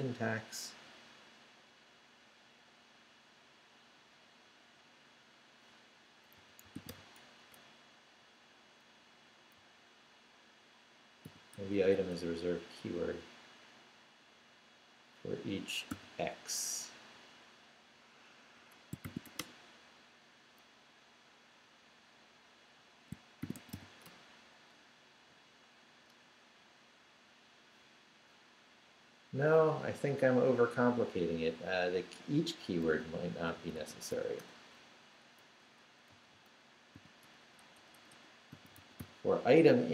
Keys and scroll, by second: 6.1-7.4 typing, 7.5 Return, 9.1 Up, 9.5 Right, 11.2 i, 11.5 BackSpace, 15.9 x, 18.3-19.7 typing, 23.2-24.2 typing, 24.8 Up, 26.1 Return, 32.9-34.6 typing, 35.5 Left, 36.1 Right, 36.9 i, 37.2 BackSpace, 38.3-39.5 typing.